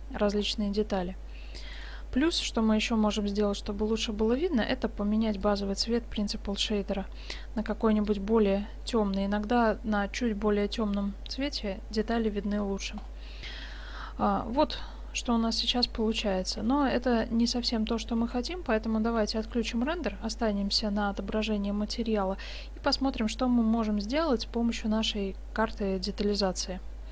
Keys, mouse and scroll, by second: 1.9-3.1 right drag, 3.1 click, 3.1-4.0 middle drag, 3.5-4.0 right drag, 4.0-4.7 drag, 4.7-5.4 middle drag, 5.4-6.5 drag, 6.6 right click, 11.0-11.6 middle drag, 13.0 middle click, 13.2 middle click, 14.7 middle click, 18.4 shift+z, 18.8-20.2 middle drag, 20.1 z.